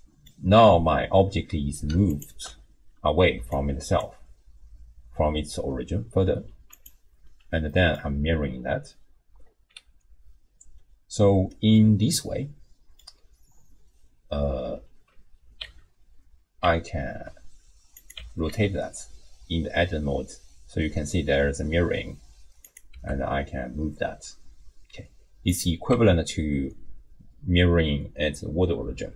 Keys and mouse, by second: 2.1 ctrl+shift+click, 3.3-6.5 d, 3.5 right click, 7.2 x, 7.7 click, 11.8-13.1 drag, 15.6 Tab, 16.6 Tab, 17.1 r, 18.2 Tab, 18.5 r, 22.9 g, 25.9 Tab.